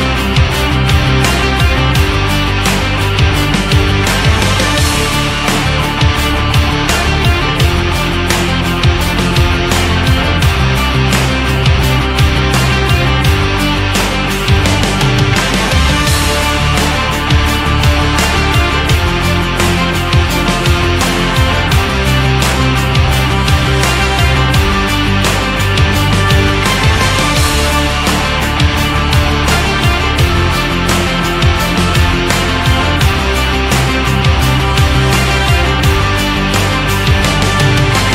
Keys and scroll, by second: 0.2 shift+x, 4.4 BackSpace, 6.7 BackSpace, 21.5 BackSpace.